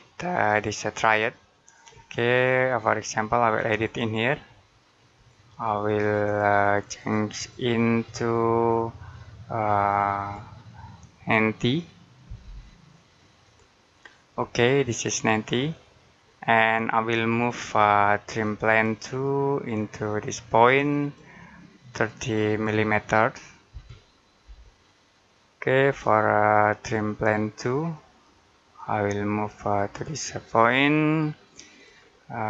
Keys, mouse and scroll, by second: 0.3 click, 3.5 click, 11.9-12.8 typing, 13.3 click, 14.2 middle click, 18.3 click, 23.6-24.3 typing, 25.7 click.